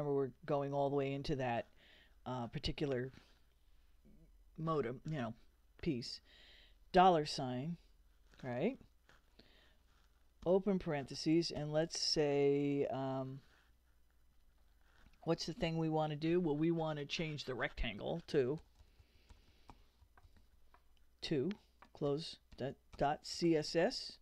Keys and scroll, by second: 7.0 shift+4, 10.4 shift+9, 18.3-24.0 typing.